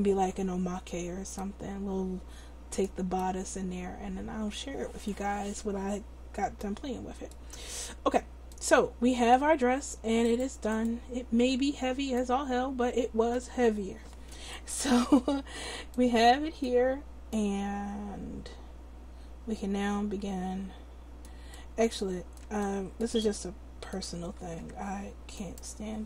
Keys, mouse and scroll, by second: 6.1 middle click, 7.1 middle click, 10.2 click, 10.8-11.8 drag, 12.4 middle click, 14.6-16.1 right drag, 24.7 Tab.